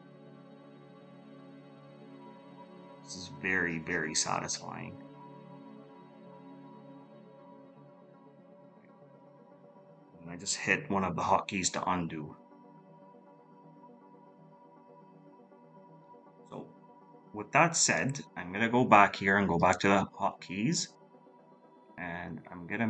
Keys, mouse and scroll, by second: 9.1 ctrl+z, 12.2 ctrl++, 12.9 ctrl+z, 15.2 ctrl+z.